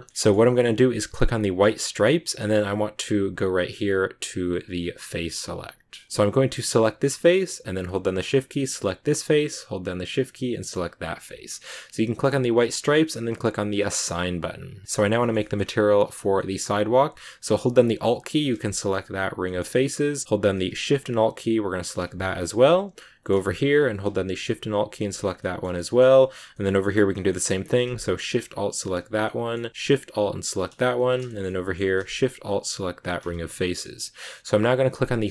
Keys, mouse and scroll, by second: 0.1-1.4 shift+middle drag, 1.4 click, 2.1-4.7 middle drag, 4.7 click, 6.7 right click, 8.9 shift+right click, 10.8 shift+right click, 12.4 click, 13.3 click, 13.6 scroll down 3, 13.8-15.5 middle drag, 15.5-16.3 scroll up 1, 16.3-18.3 middle drag, 18.3 alt+right click, 19.3 shift+middle click, 19.8-21.7 scroll up 2, 21.7 alt+shift+right click, 22.1 scroll down 3, 22.3-23.5 middle drag, 23.5 scroll up 2, 24.7 alt+shift+right click, 25.0 scroll down 2, 25.3-26.8 middle drag, 26.8-28.8 scroll up 3, 27.0 middle click, 28.8 alt+shift+right click, 29.1-30.4 middle drag, 30.4 alt+shift+right click, 30.6 middle click, 31.3 shift+scroll up 1, 31.4-32.8 middle drag, 32.8 alt+shift+right click, 33.0-33.5 shift+scroll down 3, 33.5-34.7 middle drag, 34.7 click.